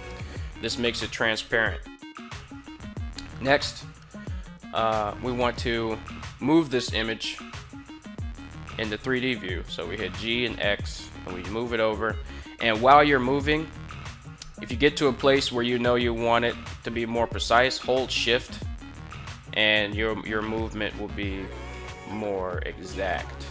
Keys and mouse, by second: 8.1 g, 8.9 x, 22.7 shift+click.